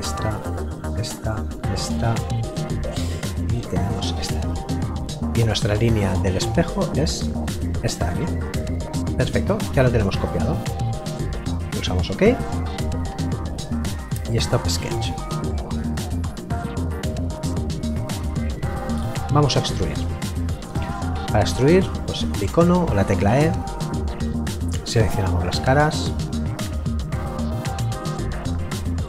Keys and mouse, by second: 12.0 click, 15.5 middle click, 22.6 click.